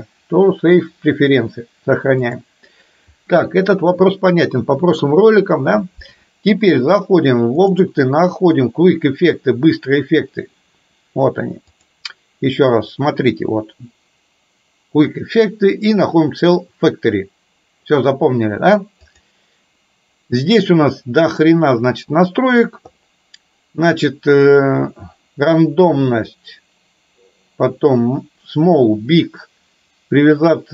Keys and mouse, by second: 7.7-9.5 drag, 12.0 click, 15.7-19.4 drag, 25.2 click.